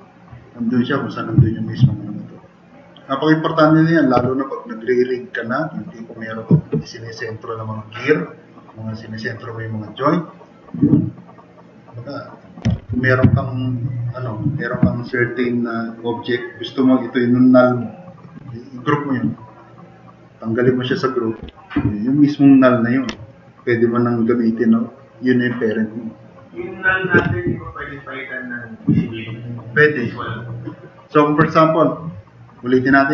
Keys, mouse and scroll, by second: 1.4 drag, 4.2 Delete, 13.3 Delete.